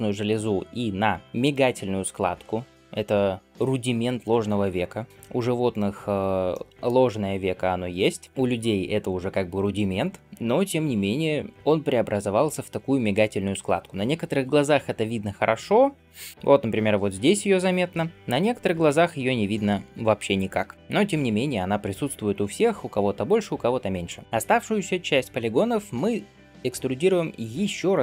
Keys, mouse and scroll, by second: 5.5-6.4 scroll down 1, 6.4 middle click, 7.1 scroll up 2.